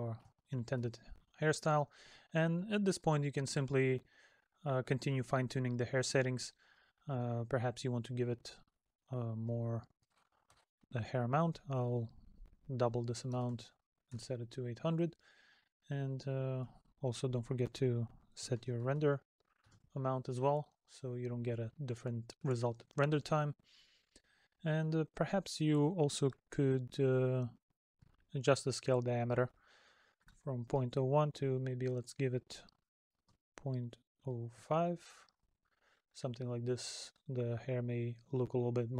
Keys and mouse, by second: 20.7 middle click, 23.8 middle click, 36.0 middle click.